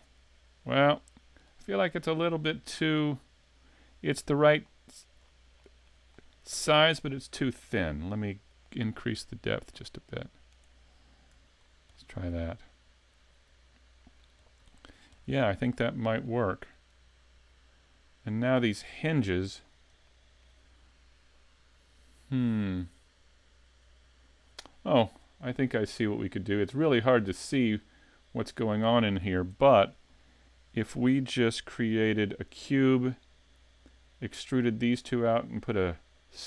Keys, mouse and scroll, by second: 1.4 right click, 2.7 scroll up 4, 3.8 scroll down 2, 4.2 middle click, 5.2 scroll up 2, 5.6 shift+middle click, 6.1 middle click, 8.5 click, 11.4 a, 11.6 scroll down 3, 12.0 middle click, 14.4 scroll down 2, 14.7 shift+middle click, 15.2 middle click, 17.4 scroll down 3, 18.0 scroll down 1, 18.2 scroll up 4, 18.6 shift+middle click, 19.6-20.1 scroll up 2, 20.1 shift+middle click, 26.4-26.8 scroll down 2, 26.8-27.3 scroll up 3, 27.3 shift+middle click, 29.6 shift+middle click, 30.0 scroll up 2, 31.5 s.